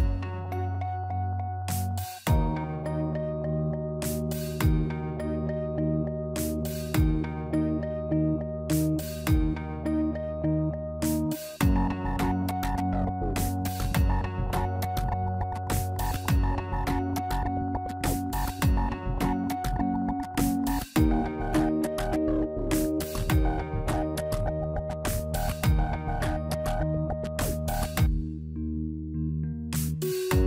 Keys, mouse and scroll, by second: 5.3 middle click, 6.3 scroll down 2, 6.6 shift+middle click, 7.4 Tab, 8.7 ctrl+r, 10.5 ctrl+b, 13.7 alt+click, 14.8 alt+shift+click, 15.7 ctrl+b, 18.9 click, 23.3 click, 24.2 alt+click, 24.8 alt+shift+click, 25.3 click.